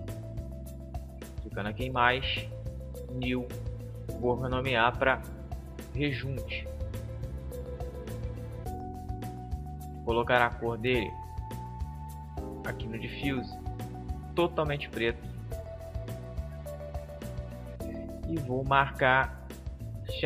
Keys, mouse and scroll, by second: 1.0-5.8 drag, 13.5-15.4 drag, 19.6-20.2 drag.